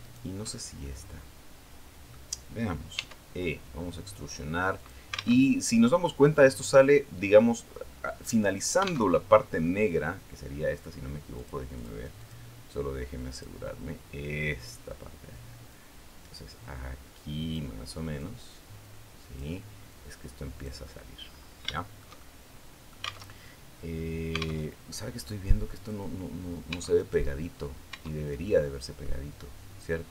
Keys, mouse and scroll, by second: 0.3-0.6 shift+scroll down 1, 0.6-2.1 shift+middle drag, 2.7 e, 4.6 click, 5.2 alt+Tab, 8.9 alt+Tab, 11.1 click, 11.5 click, 12.0 click, 13.1 click, 15.5-17.5 drag, 17.9-19.3 drag, 19.7 click, 21.5 shift+middle click, 22.4 click, 23.1 alt+Tab, 24.5 alt+Tab, 24.8 alt+click, 26.5 Tab, 26.8 right click, 27.4 scroll up 1, 27.7 Tab, 28.3 middle click.